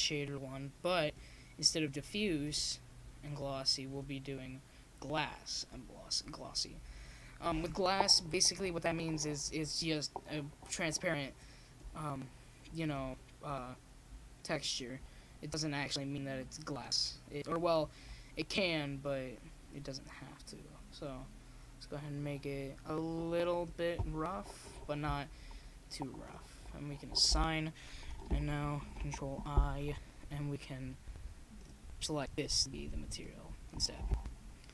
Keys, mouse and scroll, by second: 0.6 middle click, 1.5-3.6 drag, 5.5-6.6 drag, 6.9 middle click, 7.0 right click, 7.9 s, 8.7 click, 9.3-14.8 middle drag, 14.9-17.7 middle drag, 17.7 shift+z, 18.3 click, 26.8 shift+z, 27.7 right click, 29.5 middle click, 29.9 a, 30.3 a, 31.9 right click, 33.5 click, 34.4 middle click.